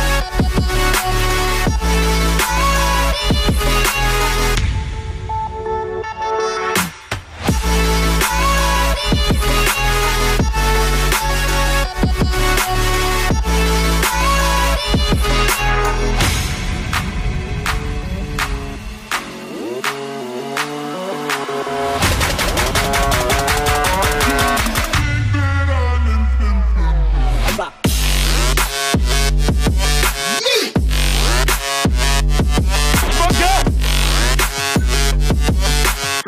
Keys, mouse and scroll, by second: 0.5-1.0 scroll up 1, 1.1-2.5 scroll down 1, 8.8 shift+click, 16.8 double click, 20.5-20.8 alt+scroll up 1.